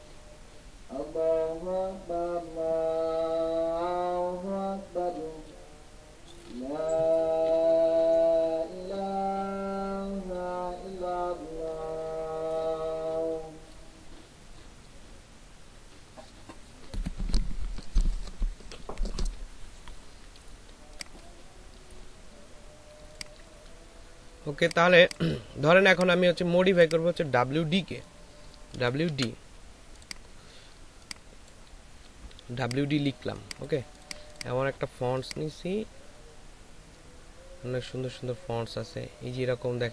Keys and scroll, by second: 24.9 space, 28.7 shift+w, 29.1 shift+d.